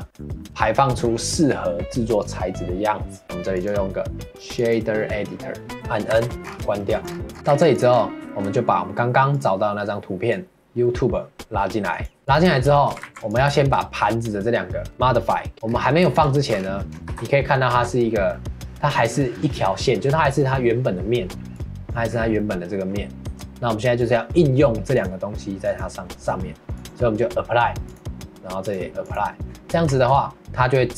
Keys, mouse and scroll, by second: 3.5-5.9 drag, 6.4 scroll up 1, 6.8 middle click, 7.0 scroll up 1, 7.4 shift+middle click, 7.5 ctrl+s, 7.9 scroll up 2, 8.3-11.3 shift+middle drag, 12.2 ctrl+s, 12.5 scroll up 2, 12.7 shift+middle click, 13.0 ctrl+s, 13.5-14.9 shift+middle drag, 14.9 click, 15.6 scroll up 3, 16.0-16.5 shift+middle drag, 17.1 KP_Decimal, 17.7 Tab, 18.3-21.4 middle drag, 21.6 click, 22.4 middle click, 23.2 Tab, 24.9 click, 25.8 click, 26.7-29.9 drag, 29.9 Tab.